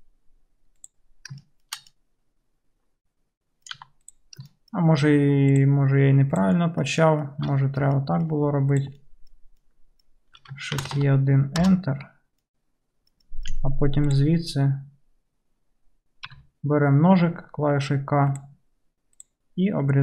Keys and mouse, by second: 3.9 2, 5.6 shift+click, 5.7-8.8 shift+middle drag, 8.8 shift+click, 8.9-14.1 shift+middle drag, 10.8 shift+e, 13.6 1, 14.1 click, 14.2-20.0 middle drag, 16.3 k.